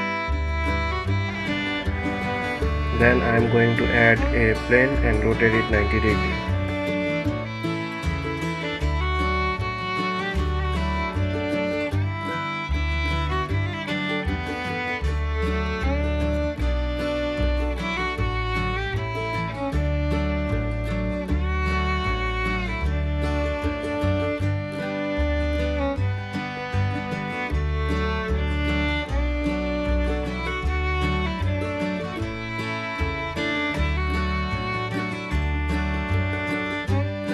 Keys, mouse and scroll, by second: 0.3-2.2 middle drag, 2.2 shift+a, 5.1 r, 15.9-18.6 middle drag, 18.6 KP_1, 19.8 ctrl+KP_3, 21.0-21.6 scroll up 2, 21.6 g, 27.2 Tab, 28.0-28.6 scroll up 1, 29.8 2, 30.4 click, 31.4 g, 36.2 ctrl+r.